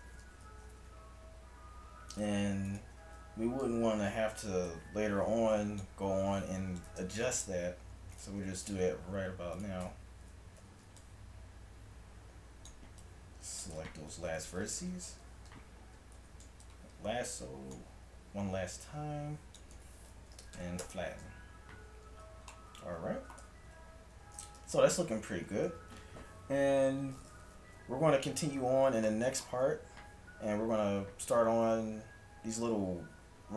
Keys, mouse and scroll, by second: 0.0 a, 0.9 Tab, 3.0 Tab, 3.4 a, 4.1 a, 6.6 s, 7.6 a, 8.4 Tab, 9.1 a, 9.9 Tab, 10.6 a, 14.3 s, 16.3 a, 20.3 s, 21.9 a, 23.4-25.7 typing, 25.0 Tab.